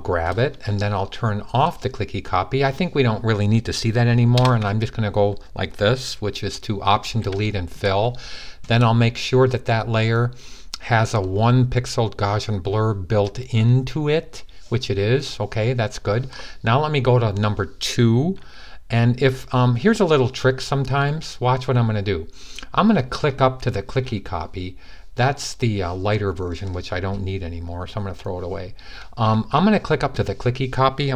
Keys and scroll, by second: 6.9 alt+super+d.